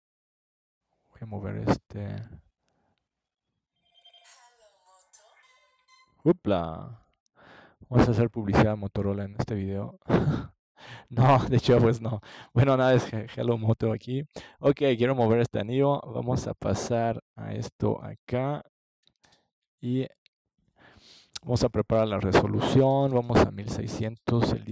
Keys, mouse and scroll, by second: 0.3 click, 0.9 click, 1.1 KP_5, 2.7 g, 4.9-6.6 drag, 5.4 KP_4, 8.4 middle click, 9.0 ctrl+s, 13.0 click, 23.5-24.7 drag.